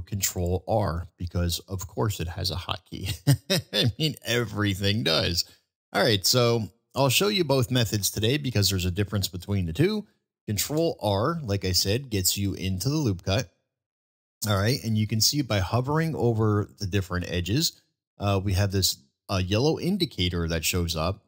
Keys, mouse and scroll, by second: 10.6 ctrl+r, 10.7 ctrl+r.